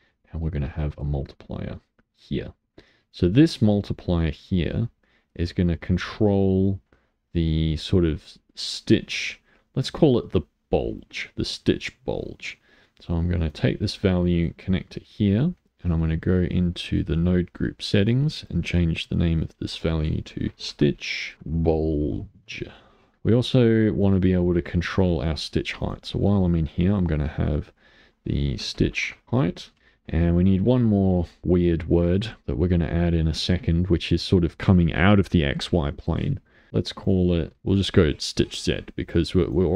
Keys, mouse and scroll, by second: 0.5 click, 3.1 click, 4.2-7.2 drag, 13.5 click, 16.8-21.3 drag, 21.3 BackSpace, 23.1 click, 25.8-29.2 drag, 32.4 click, 36.7 click.